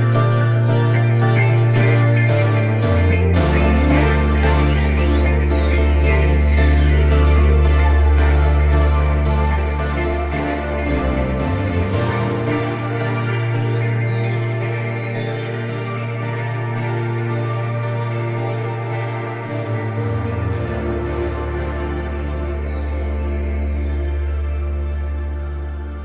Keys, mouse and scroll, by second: 2.1 scroll down 3, 2.3 shift+middle click, 2.4-3.3 middle drag, 3.3 scroll up 1, 3.5-4.5 drag, 4.5 scroll down 1, 4.6-5.2 shift+middle drag, 5.2 f, 5.5-6.9 drag, 6.9 scroll down 3, 7.0 shift+middle drag, 7.2 scroll up 2, 7.4 shift+middle click, 7.6 f, 7.7 shift+middle click, 8.3-9.8 drag, 9.8 shift+middle click, 10.1 click, 10.5 scroll down 2, 10.6 shift+middle click, 10.9 scroll up 2, 10.9 middle click, 11.1 drag, 11.4-11.7 middle drag, 11.7-12.2 drag, 12.2 middle click, 12.4 f, 12.5-13.0 drag, 13.0 scroll down 2, 13.0 shift+middle click, 13.1 f, 13.4 f, 13.5-14.4 shift+middle drag, 14.4 scroll up 1, 14.5 shift+middle click, 15.2 scroll down 1, 15.3-15.9 middle drag, 16.3 click, 16.4 scroll down 2, 16.4 middle click, 16.6-26.0 typing, 17.1 click, 17.1 scroll up 1, 17.9 scroll up 1, 20.9 shift+middle click, 21.4 scroll down 2, 21.7 scroll up 2, 22.6 alt+click, 23.2 click, 24.2 shift+middle click, 24.3 scroll up 1, 24.7 shift+middle click.